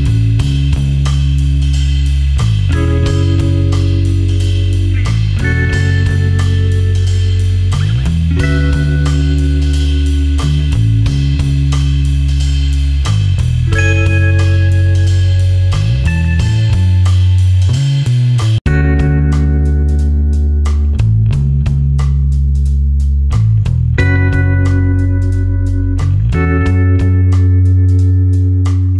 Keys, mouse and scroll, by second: 2.0-3.4 scroll down 1, 3.4 click, 4.3 space, 4.6 ctrl+alt+click, 5.8 ctrl+click, 8.1 ctrl+click, 12.5 shift+click, 13.6 shift+click, 16.9-19.6 scroll down 1, 19.6-21.5 scroll up 1, 21.5 click, 26.1 click.